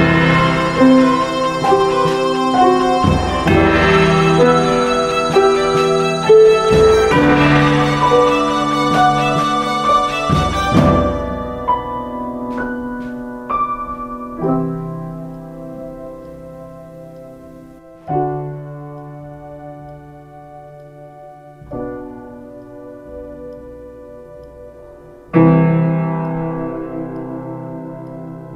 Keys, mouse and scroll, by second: 2.2 ctrl+space, 10.9 ctrl+space, 11.7 space, 25.3 click.